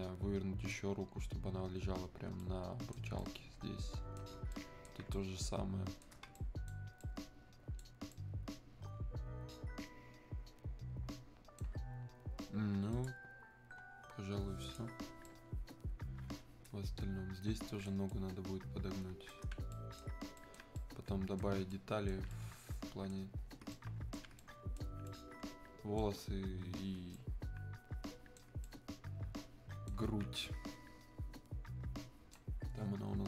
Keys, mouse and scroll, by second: 12.9 click, 15.3-23.5 right drag, 23.5 scroll up 1, 23.7-33.2 alt+right drag.